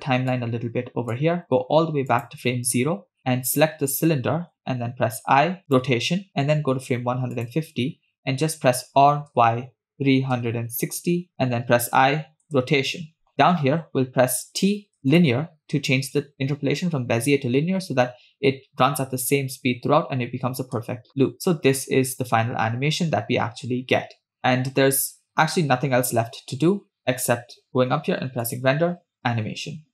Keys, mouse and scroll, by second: 0.4 click, 2.2 click, 3.5 click, 5.2 i, 7.6 click, 9.0 r, 12.6 i, 14.4 t, 20.9 space, 21.6-22.3 scroll up 3, 22.8 scroll down 1, 23.4-24.3 scroll down 1, 27.1 space, 28.5-29.9 drag.